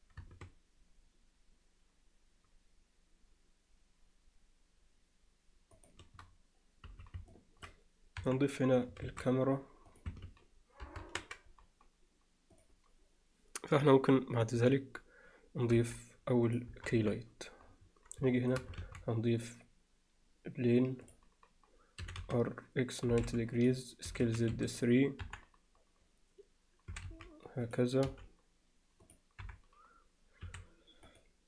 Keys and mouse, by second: 6.9 z, 7.3-7.7 alt+middle drag, 8.2 KP_1, 9.0 shift+a, 10.9 ctrl+alt+KP_0, 16.7 KP_0, 17.0 KP_7, 18.8 shift+a, 22.0 r, 24.1 s, 25.2 KP_1, 26.9 s, 28.1 g, 29.4 KP_7, 30.5 s.